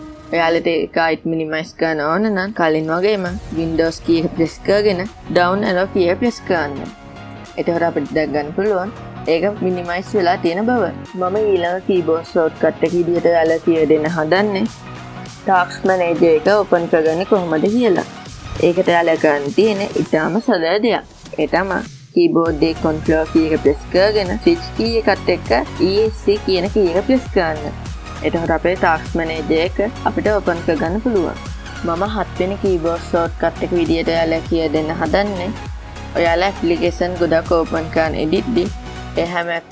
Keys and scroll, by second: 6.5 super+Down, 26.5 ctrl+shift+Escape.